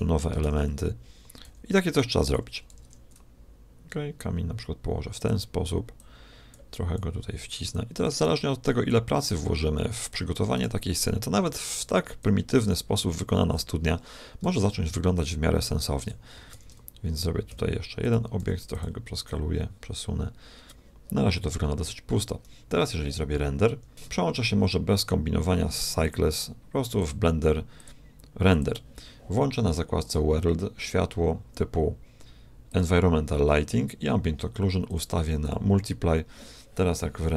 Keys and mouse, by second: 0.4 shift+d, 2.7 r, 5.9-10.6 drag, 8.1 right click, 8.9-10.0 right drag, 10.8-12.4 right drag, 11.4-14.6 drag, 14.6 g, 16.5 shift+d, 18.3 s, 19.3-21.3 drag, 23.9 Escape, 26.0-29.5 drag, 30.0-31.7 drag, 32.7-34.4 drag, 34.9-36.5 drag.